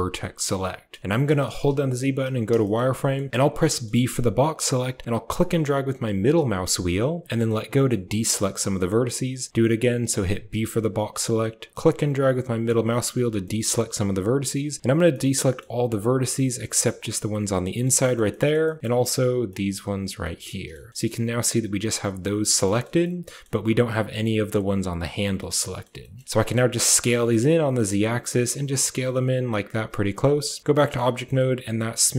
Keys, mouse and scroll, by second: 0.8 click, 1.1 shift+click, 1.4 z, 2.5 shift+click, 2.8 click, 3.3 click, 3.3 b, 3.5 click, 3.9 b, 7.6 shift+click, 8.2 shift+click, 10.4 b, 12.8 shift+click, 13.1 b, 13.9 b, 14.7 b, 15.7 click, 15.9 middle click, 17.5 shift+middle click, 17.9 click, 18.1 shift+click, 18.5 click, 18.8 b, 20.1 click, 20.9 z, 22.5 shift+middle click, 22.9 middle click, 23.1 click, 23.1 middle click, 25.2 middle click, 25.9 shift+middle click, 26.1 shift+middle click, 26.7 s, 30.1 Tab, 30.4-30.8 drag, 31.0 shift+click, 31.2-32.1 drag.